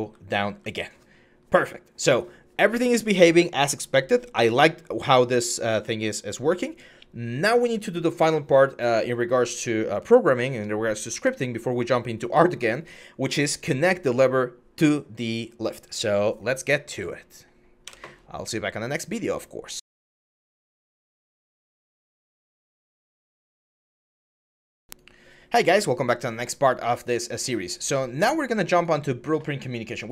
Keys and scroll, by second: 0.0-0.2 typing, 17.6 Escape, 30.0-30.1 typing.